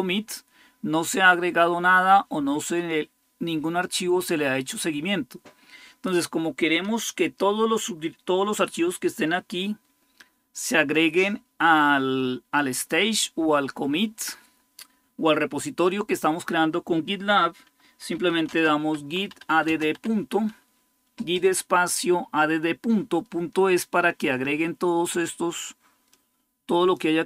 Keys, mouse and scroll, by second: 17.6-20.2 typing, 25.9-27.2 drag.